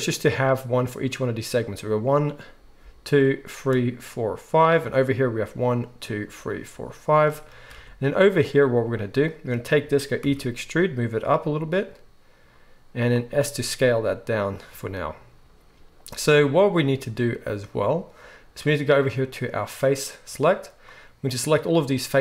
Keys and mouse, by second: 7.7 alt+a, 8.2-13.1 drag, 10.2 e, 13.1-19.6 middle drag, 13.3 s, 19.6-22.2 drag.